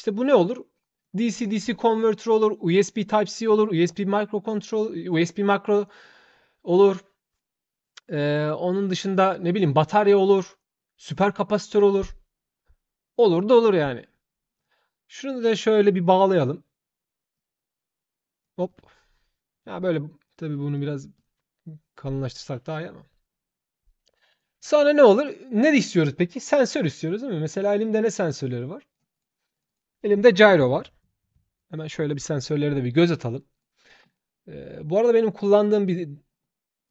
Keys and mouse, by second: 0.0 shift+click, 14.3 shift+click, 15.7 shift+click, 17.2-18.2 shift+drag, 18.4 shift+click, 19.7 shift+click, 20.5 shift+click, 20.9 click, 24.1 click, 25.6 click, 27.4-28.7 drag, 28.9 shift+click, 29.3 shift+click, 29.4 shift+click, 32.4 click, 33.3 shift+click, 35.1 shift+click, 36.6 click.